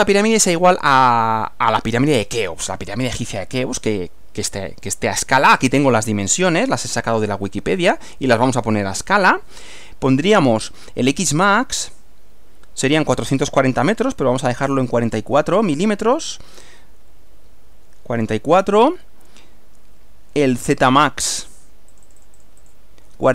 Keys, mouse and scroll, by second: 0.3-1.3 middle drag, 1.5-4.1 middle drag, 6.4 middle click, 7.9-9.1 middle drag, 13.9 click, 14.8 click, 17.5 4, 21.3 click, 22.0 click, 23.1 4.